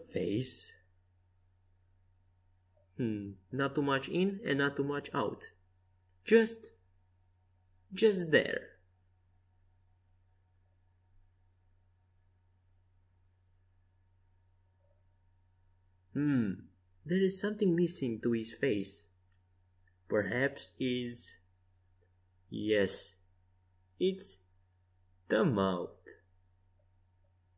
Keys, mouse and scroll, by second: 3.9-5.7 middle drag, 7.8 KP_5, 8.2 KP_1, 9.0 KP_3, 12.1 z, 13.1-15.9 middle drag, 22.9-26.6 middle drag, 27.2-27.5 drag.